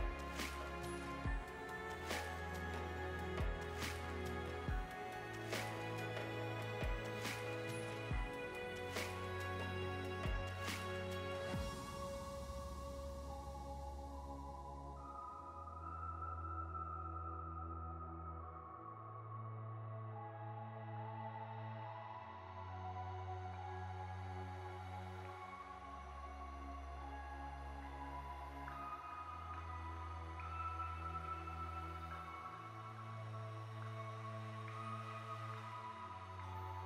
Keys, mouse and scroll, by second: 1.3 Tab, 2.8 click, 4.1 click, 5.3 click, 6.1 click, 7.3 click, 8.2 scroll up 2, 8.5-9.3 scroll down 2, 9.4 g, 10.1-12.1 scroll up 10, 12.1-13.3 scroll down 2, 13.3 scroll down 1, 14.6-15.0 scroll down 1, 15.1 click, 17.6 click, 19.1 g, 20.3 middle click, 21.4-22.1 scroll up 4, 26.8 click, 31.1 click, 35.3 click, 36.0 g.